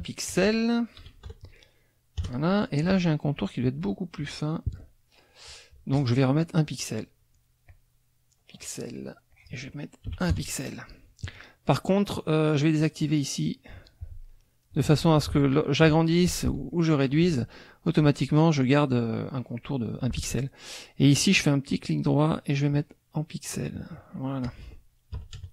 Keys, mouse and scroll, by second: 0.3 click, 1.0 KP_1, 2.2 KP_Enter, 3.3 click, 5.9 click, 7.7-9.0 drag, 9.3 click, 10.1 KP_1, 10.3 KP_Enter, 12.8 click, 15.4 ctrl+shift+click, 16.7 ctrl+shift+click, 20.2 ctrl+z, 21.9 click, 23.7 click, 24.4 click, 25.1 KP_Subtract, 25.3 KP_Add.